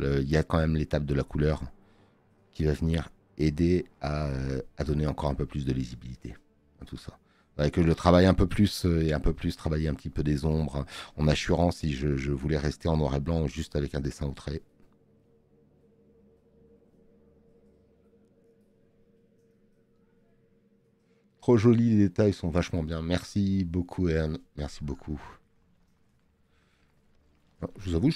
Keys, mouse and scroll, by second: 10.1 space, 10.5 click, 20.3 space.